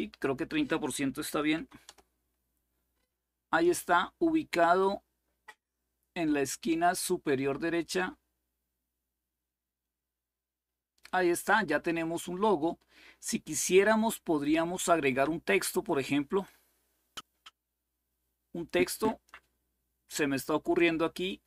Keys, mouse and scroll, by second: 0.9 Delete, 1.3 3, 1.6 Return, 4.5-10.8 drag, 15.6 click.